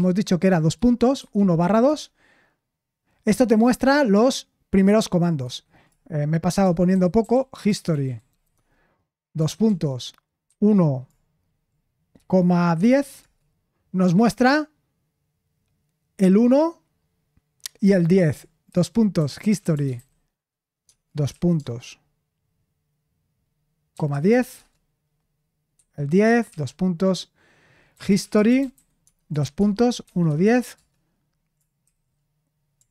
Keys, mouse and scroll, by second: 0.4-2.1 typing, 6.3-9.6 typing, 10.8-11.5 typing, 12.9-13.6 typing, 18.4-21.5 typing, 24.3-25.0 typing, 26.4 shift+;, 28.2-30.9 typing, 32.1 typing.